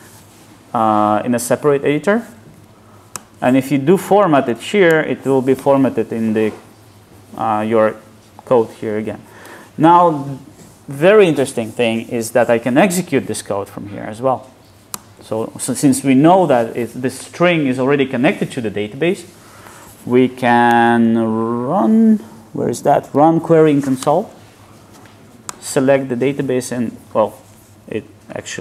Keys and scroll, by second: 15.0 alt+Return.